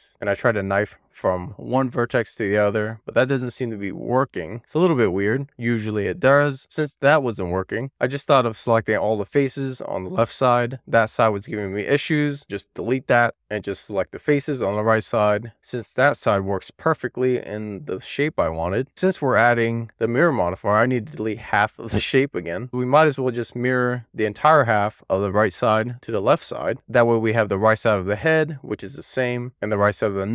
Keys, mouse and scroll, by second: 0.2 k, 4.8-7.8 middle drag, 7.9-8.9 ctrl+click, 8.6 ctrl+click, 8.9 ctrl+click, 9.4 ctrl+click, 9.7 ctrl+click, 9.9 middle click, 10.2 middle click, 10.6 ctrl+click, 10.7 middle click, 11.2 ctrl+click, 11.8 ctrl+click, 12.0 middle click, 12.6 x, 13.4 shift+click, 14.5 shift+click, 15.7 shift+click, 16.3 shift+click, 16.6 shift+click, 17.2 middle click, 17.8 shift+click, 18.1 shift+click, 18.5 middle click, 19.1 alt+z, 20.6-23.5 drag, 24.0 x, 27.2 alt+z.